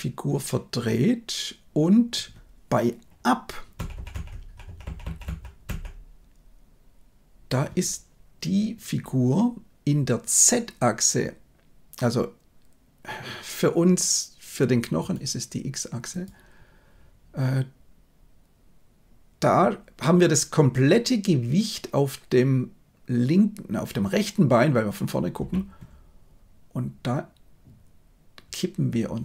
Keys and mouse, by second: 3.7 Right, 3.9 Right, 4.0 Right, 4.2 Right, 4.6 Right, 4.8 Right, 5.0 Right, 5.2 Right, 5.6 Right, 14.9-16.3 middle drag.